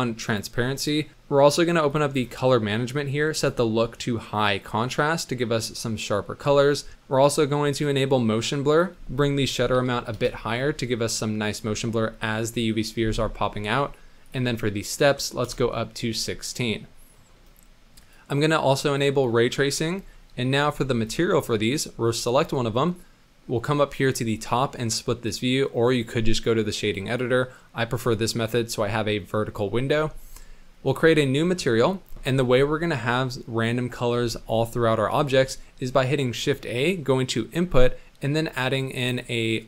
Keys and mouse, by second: 0.8 click, 1.9 click, 3.3-4.7 drag, 5.1 middle click, 5.9 middle click, 7.7 click, 8.8-10.2 drag, 14.4-15.5 drag, 18.8 click, 20.1 middle click, 24.5-26.7 drag, 27.1-28.1 drag, 29.9 n, 30.9 click, 31.9 middle click, 35.3 shift+a.